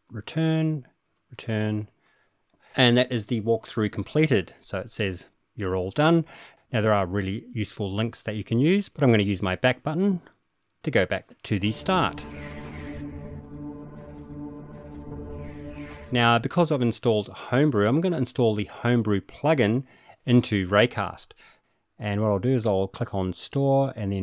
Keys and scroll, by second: 0.0 super+Return, 1.0 super+Return.